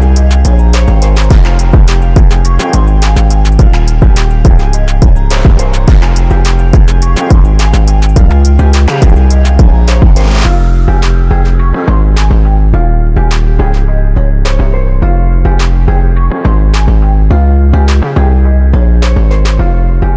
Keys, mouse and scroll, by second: 1.8 click, 1.8 ctrl+z, 2.7 click, 3.8 click, 7.5-9.2 drag, 9.3 click, 10.8 typing, 11.1 click, 11.7 ctrl+z, 12.2 click, 16.2 click, 16.8-19.5 drag.